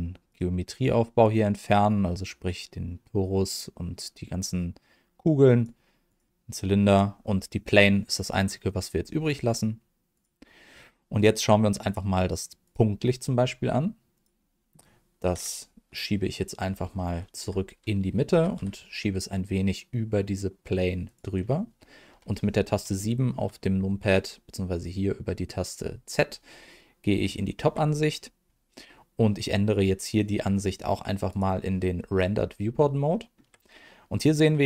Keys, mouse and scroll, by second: 0.3 click, 3.0 click, 6.0 click, 6.8 click, 10.1 click, 11.1 click, 11.8 click, 12.6 click, 14.1 click, 17.0 alt+g, 18.3 g, 18.5 z, 21.0 click, 22.1 KP_7, 23.0 shift+middle click, 23.7-24.0 scroll up 1, 27.3 shift+middle click, 31.4 click, 32.4-32.7 scroll up 1, 33.1 shift+middle click.